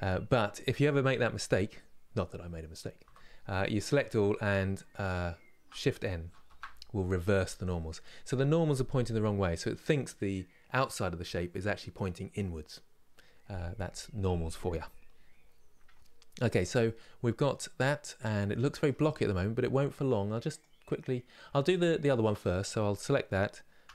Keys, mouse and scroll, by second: 2.7 a, 6.2 shift+n, 16.3 Tab, 16.6-19.6 middle drag, 21.5 click, 22.4 Tab, 23.6 a.